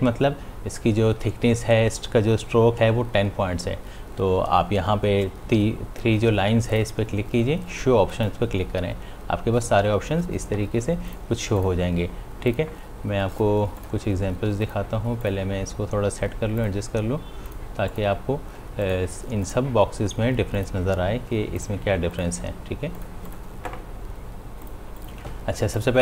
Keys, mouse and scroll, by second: 7.0 click, 11.5 click.